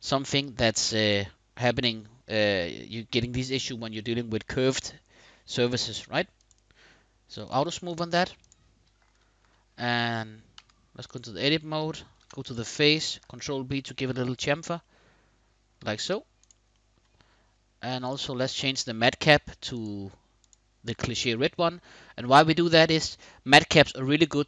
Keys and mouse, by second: 0.6 click, 6.2 click, 7.1 click, 7.6 click, 8.0 click, 10.3 Tab, 11.4 middle click, 11.9 3, 12.1 click, 13.2 ctrl+b, 14.1 click, 14.5 middle click, 15.7 Tab, 16.5 middle click, 17.8-20.4 drag, 20.6-21.9 middle drag, 22.5-24.4 middle drag.